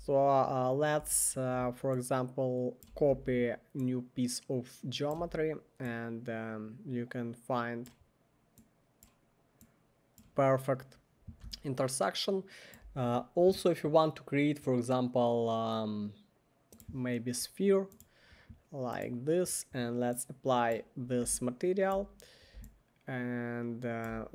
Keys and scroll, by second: 1.0 w, 3.1 e, 5.2 w.